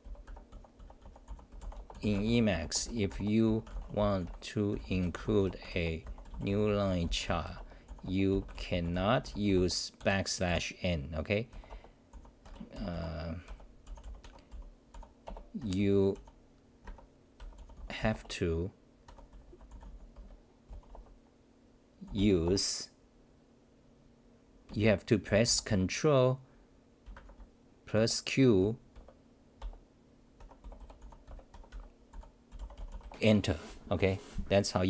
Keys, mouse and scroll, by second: 0.0-1.7 typing, 12.4 Home, 12.7-20.2 typing, 15.6 Home, 15.6 Return, 16.8 Home, 30.4-32.1 typing, 31.5 Home, 33.2 Home.